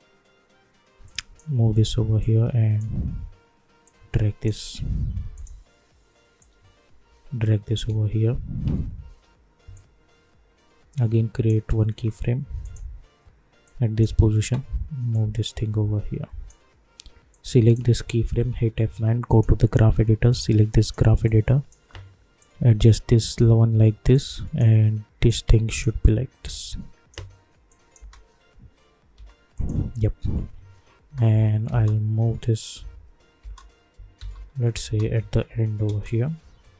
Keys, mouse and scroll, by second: 9.0 =, 9.7-18.3 drag, 18.3 F9, 19.2-24.1 drag, 24.1-26.4 drag, 26.4 click, 27.9 space, 29.5 click, 30.8 -, 31.1 -, 31.3 -, 31.7 space, 35.4 [, 35.8 space.